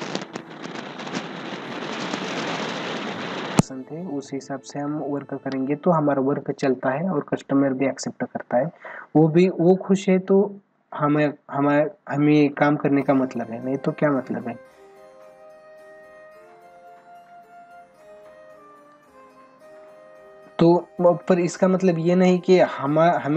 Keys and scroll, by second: 2.1 ctrl+=, 3.9 ctrl+=, 8.8 ctrl+=.